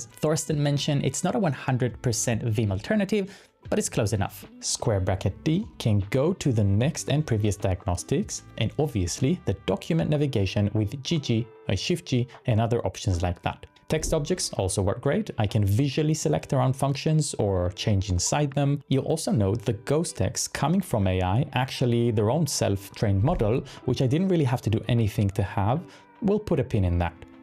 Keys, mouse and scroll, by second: 4.6-11.2 typing, 12.2 ctrl+d, 12.6 ctrl+d, 12.9-14.0 typing, 23.4-23.8 typing, 25.6 typing.